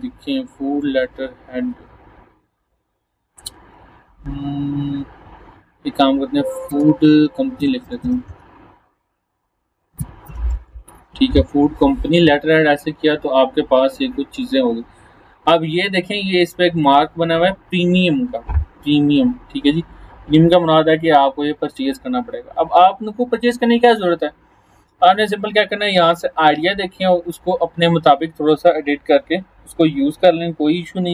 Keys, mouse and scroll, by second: 3.7 scroll down 1, 4.9 scroll up 1, 6.7-10.3 typing, 10.5 Return, 12.5 scroll down 1, 16.8 click, 22.4 scroll down 1, 27.1 scroll down 1.